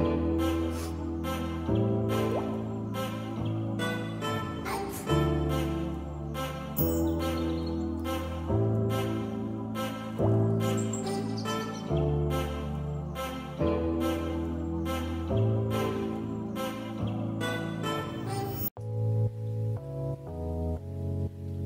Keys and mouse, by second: 1.1 ctrl+s, 2.3 shift+middle drag, 2.7 click, 3.3 click, 9.5 shift+middle click, 11.5 click, 13.0 shift+middle drag, 13.6 Tab, 13.9 shift+middle click, 15.5 click, 17.2-19.4 drag, 20.4 click.